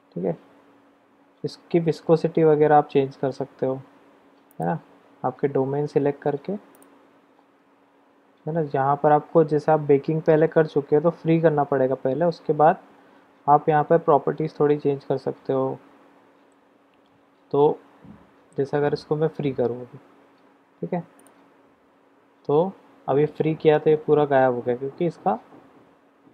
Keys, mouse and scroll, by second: 4.6 click, 6.7 click, 21.8 drag, 22.0-24.1 middle drag, 22.0-22.4 scroll down 1.